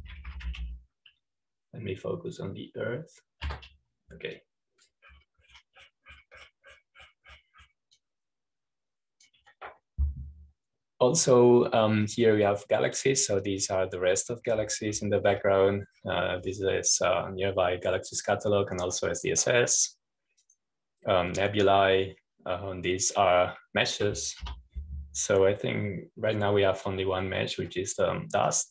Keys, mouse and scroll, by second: 1.2-3.0 typing, 6.0 Escape, 6.5-7.6 drag, 10.0-12.0 drag, 14.6 click, 15.7-17.1 drag, 17.3-17.8 scroll down 2, 18.4-18.8 scroll down 1, 20.4-21.5 drag, 22.4 click, 26.5 Home.